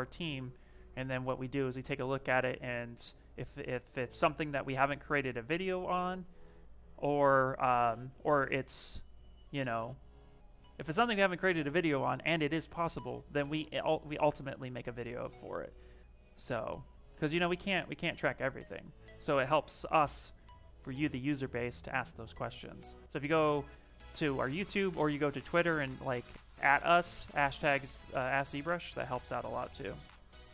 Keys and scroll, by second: 0.5 ctrl+z, 1.0 s, 9.2 s, 13.8 s, 19.2 s.